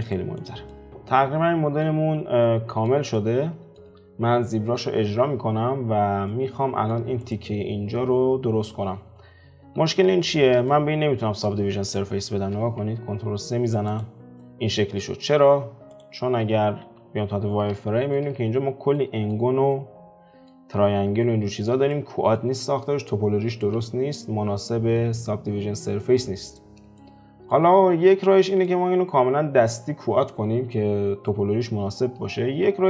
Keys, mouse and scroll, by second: 0.0 click, 0.3 click, 0.7-6.1 middle drag, 6.3-7.2 middle drag, 7.2 click, 9.6 alt+q, 10.0-10.5 scroll up 4, 10.7-13.0 shift+middle drag, 13.0 ctrl+3, 13.8 click, 14.4-15.9 middle drag, 15.9 click, 16.8 F4, 17.7-22.5 shift+middle drag, 22.5-24.1 scroll down 2, 27.0-30.8 shift+middle drag.